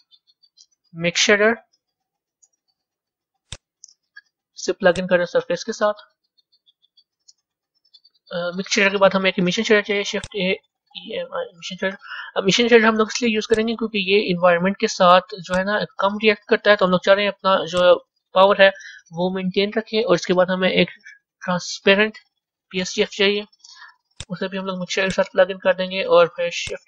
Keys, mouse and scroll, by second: 4.8-7.1 drag, 7.1-14.0 middle drag, 16.3 click, 18.3 shift+a, 24.9 drag.